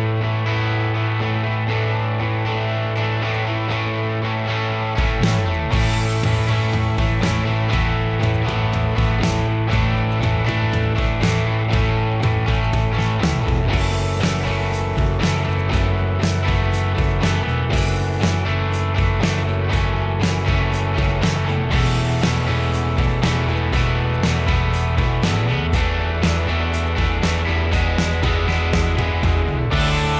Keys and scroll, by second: 1.4-2.9 typing, 4.6 Escape, 5.3 r, 5.7 Escape, 13.9-14.9 typing, 15.0 Return, 15.1 Escape, 16.0 ctrl+g, 17.0 m, 20.5-23.2 typing, 20.9 Return, 21.9 Return, 24.4-25.1 typing, 27.8 typing, 29.1-30.1 typing.